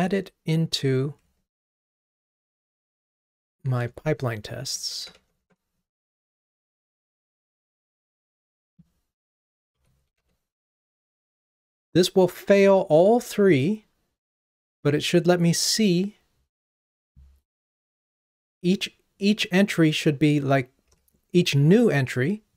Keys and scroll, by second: 1.4 ctrl+Tab, 10.3 super+v, 20.9 ctrl+r.